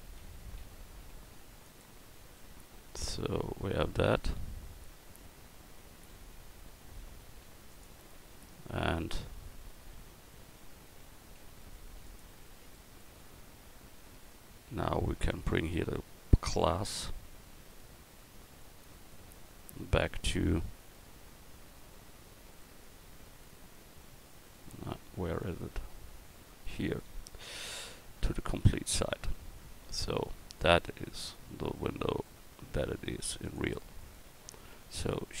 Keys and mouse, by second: 0.2 l, 1.1 x, 2.6-4.3 drag, 6.1 l, 7.3 x, 8.1-9.6 drag, 10.6 l, 11.6 x, 14.0 typing, 16.9-18.2 typing, 17.7-20.9 right drag, 29.6 Tab, 32.1-35.4 right drag, 33.0 x.